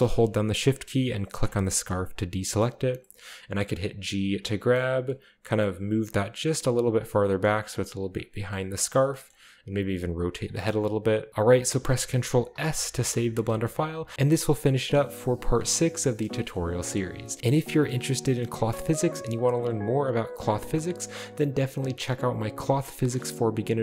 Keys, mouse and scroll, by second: 1.4 shift+right click, 1.9 shift+right click, 2.5 shift+middle drag, 3.6 middle click, 4.0 g, 4.7-5.7 drag, 5.1-5.7 middle drag, 5.9-8.6 typing, 6.2 click, 6.9 drag, 7.2-7.5 scroll down 1, 7.5-8.5 scroll up 2, 8.1-8.5 drag, 8.5-9.9 middle drag, 8.5-9.9 scroll down 2, 9.0 drag, 9.7-11.3 typing, 10.1 click, 10.4 shift+click, 10.6-11.7 scroll down 2, 10.8-11.3 middle drag, 11.3 ctrl+s, 11.3 Tab, 11.7 ctrl+middle click, 12.5 ctrl+s, 13.2 shift+scroll down 1, 13.2-14.0 shift+middle drag, 14.5 middle click, 16.3 shift+middle click, 16.6 shift+middle click, 17.3 middle click, 17.6 scroll down 2, 20.3 middle click, 20.7 middle click.